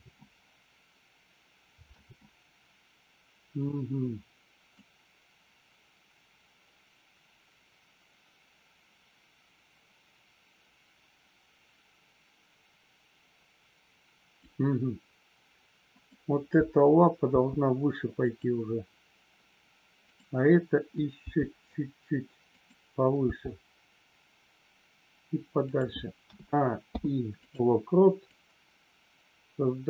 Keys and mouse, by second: 4.8 click, 17.2 g, 18.2 click, 20.1 click, 21.2 g, 22.5 click, 23.1 g, 25.7 click, 26.8 i, 28.3 click.